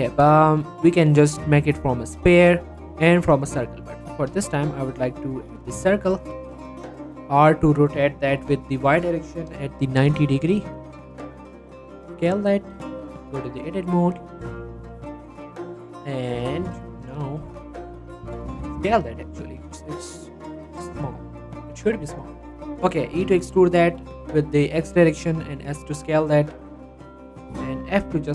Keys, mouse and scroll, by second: 0.3 shift+a, 3.4 click, 3.8-4.1 scroll down 1, 4.1 r, 4.4 x, 5.1 right click, 5.3 r, 5.7 x, 6.3 right click, 6.8 r, 7.1 x, 8.3 y, 12.2 y, 13.0 click, 13.2 Tab, 13.4 middle click, 13.7-14.7 scroll up 1, 14.7 click, 15.5-15.8 scroll up 1, 17.6-18.5 scroll up 1, 18.5 Tab, 18.9 s, 21.0 click, 21.6 s, 22.0 click, 22.4 Tab, 23.1 e, 23.3 x, 24.5 click, 25.2 s, 26.1 click, 26.3 middle click, 26.8 s, 27.2 click, 27.9 g.